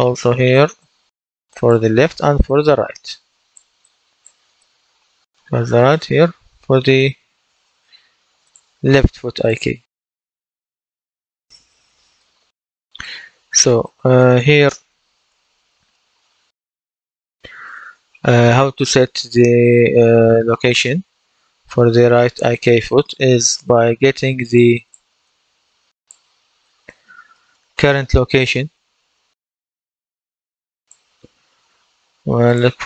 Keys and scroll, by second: 6.8-8.0 typing, 11.5 F10, 32.7-32.8 typing.